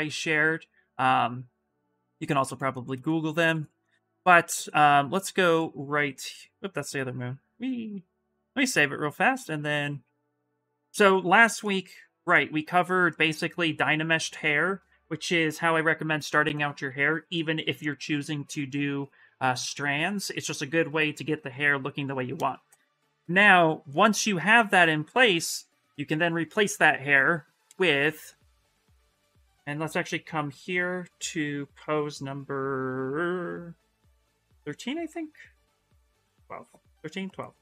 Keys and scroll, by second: 9.7 Escape.